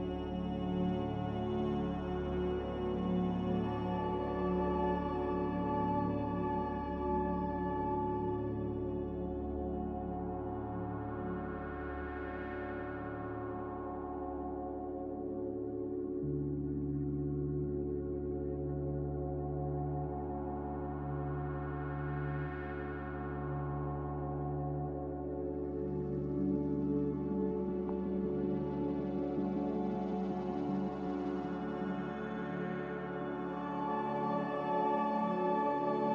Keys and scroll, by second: 20.4 ctrl+w, 22.7 z, 28.8 a.